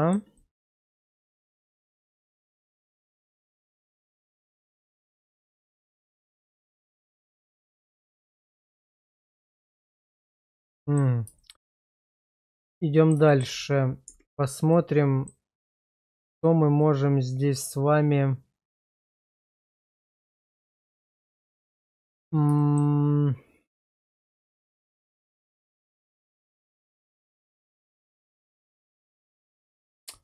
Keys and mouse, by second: 0.4 middle click, 1.7 middle click, 2.1 Tab, 2.5 click, 3.2 Tab, 3.8 q, 5.5 middle click, 6.3 shift+middle drag, 7.0 middle click, 7.6 q, 9.1 middle click, 9.8-11.0 middle drag, 11.4 shift+middle click, 12.8 middle click, 13.3 shift+middle click, 14.0 Tab, 14.7 middle click, 16.2 middle click, 16.8-22.1 middle drag, 22.6 shift+middle click, 24.9 shift+middle click, 25.5-29.8 middle drag.